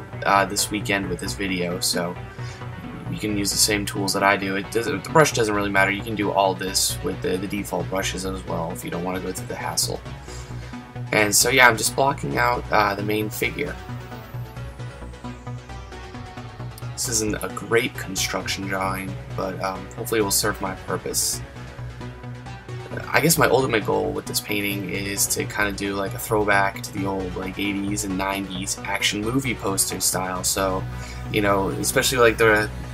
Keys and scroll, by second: 13.6 ctrl+z, 13.9 ctrl+z, 25.6 ctrl+z.